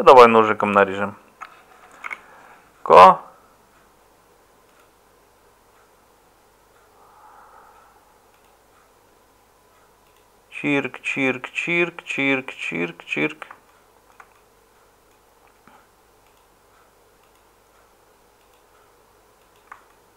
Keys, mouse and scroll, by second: 2.0 k.